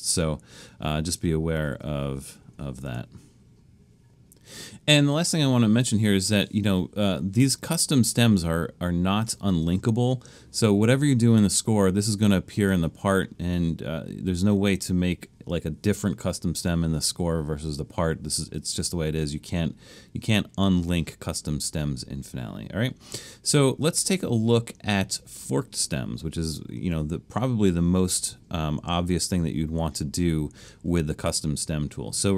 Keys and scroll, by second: 1.2 |, 1.7 Left, 1.8 Left, 2.2 |.